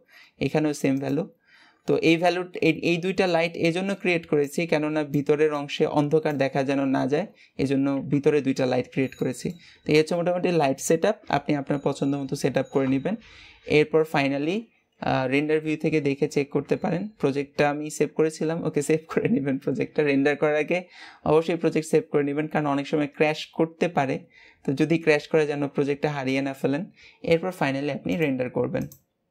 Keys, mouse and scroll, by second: 0.8 click, 1.8-2.3 middle drag, 2.3-3.1 scroll up 2, 3.1-8.2 middle drag, 8.4-9.1 scroll down 4, 9.1-12.1 middle drag, 12.7 KP_0, 25.7 ctrl+s, 27.9-29.3 drag.